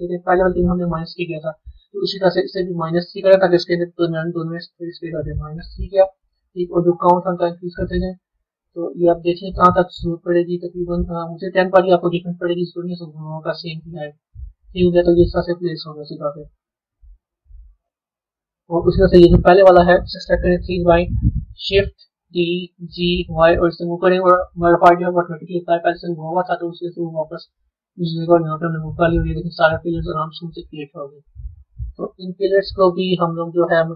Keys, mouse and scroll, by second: 1.6 click, 2.7-5.8 drag, 7.2 click, 8.8-11.6 middle drag, 11.6 click, 12.3-15.4 middle drag, 16.6 click, 19.1 click, 20.3 KP_3, 22.2 shift+d, 30.1-32.8 middle drag, 32.8 click.